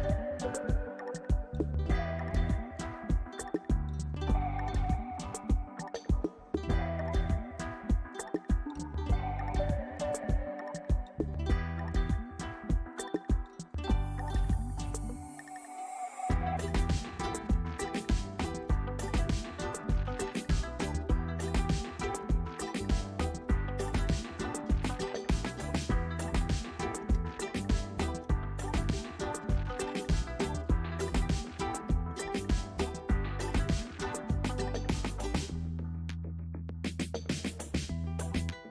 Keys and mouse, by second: 1.2 ctrl+r, 3.0 shift+s, 3.6 s, 5.0 Tab, 5.4 middle click, 6.0 ctrl+s, 6.2 middle click, 6.9 shift+middle click, 7.8 ctrl+s, 7.9 middle click, 9.1 shift+middle click, 9.3 middle click, 10.1 middle click, 11.5 shift+middle click, 13.0 s, 14.6 click, 14.9 middle click, 16.1 click, 16.8 shift+click, 17.2 click, 17.7 s, 21.2 s, 25.6 middle click, 26.6 middle click, 28.2-29.4 drag, 31.9 ctrl+a, 32.4 click, 32.7 ctrl+a, 32.9 click, 33.5 ctrl+a, 34.3 Tab, 34.9 click, 35.5 click, 36.6 click, 37.4 click.